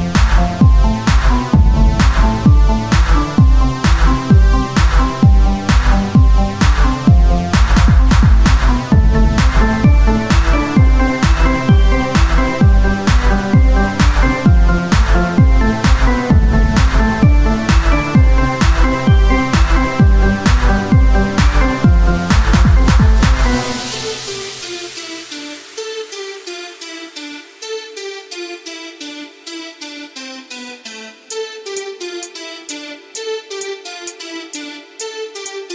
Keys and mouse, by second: 0.9-4.7 right drag, 1.6-11.1 drag, 3.5 middle click, 5.5-9.6 right drag, 11.1 Tab, 13.9 Tab, 14.9 ctrl+Tab, 15.5 click, 18.4 o, 18.9 s, 24.7 Tab, 28.9-30.0 drag, 30.0 KP_7, 31.2 r, 33.9-35.1 drag, 35.5 Tab.